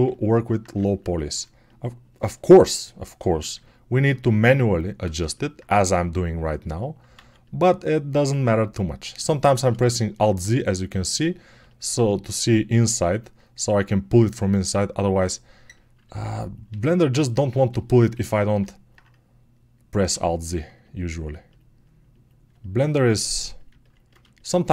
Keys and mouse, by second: 7.0 alt+z, 9.5-15.5 ctrl+alt+shift+drag, 15.5-19.9 alt+right drag, 16.5 alt+a, 20.0 alt+z, 24.3-24.7 alt+shift+drag.